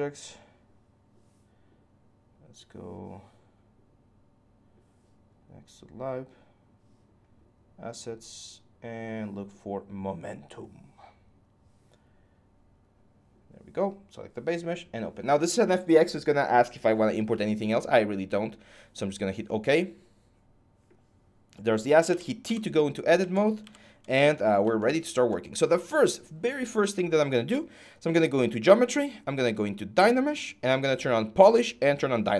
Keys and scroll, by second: 21.9-22.2 typing, 23.4 ,.